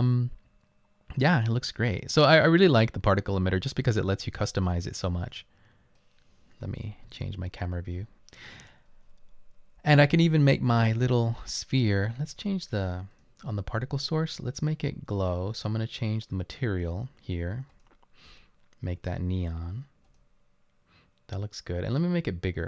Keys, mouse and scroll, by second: 1.9 right click, 2.2 right click, 3.0 right click, 4.5 scroll down 1, 5.6 right click, 6.7-8.3 typing, 12.6-13.3 typing, 20.1 click.